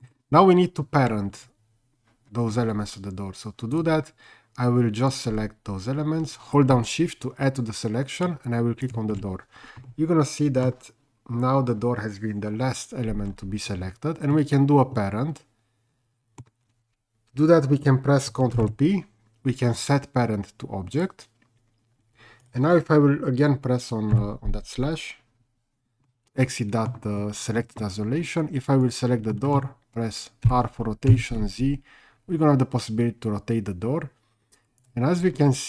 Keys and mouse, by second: 5.1 click, 9.9-10.6 middle drag, 14.3-16.4 middle drag, 18.5 ctrl+p, 24.2 /, 26.1-26.9 middle drag, 28.8 click, 29.3 middle click, 30.4 r, 31.1 z.